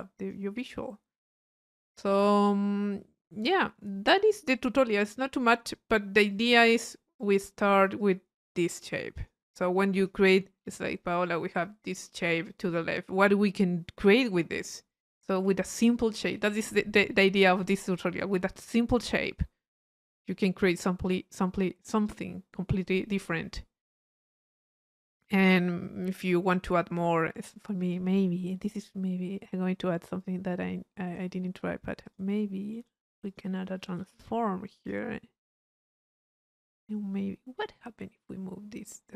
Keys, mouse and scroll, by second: 1.4 click, 3.4-4.5 middle drag, 4.5-6.1 drag, 6.3 click, 7.2 click, 8.0 click, 9.2 click, 9.8 click, 10.8-12.4 drag, 10.8 p, 23.9-26.5 drag, 26.7 click, 27.5 middle click, 27.9 click, 29.3 right click, 30.2-31.5 drag, 31.5 middle click, 32.0 click, 32.7 right click, 33.3 click, 34.8 click, 35.8 click, 38.1 middle click, 38.1 scroll up 1.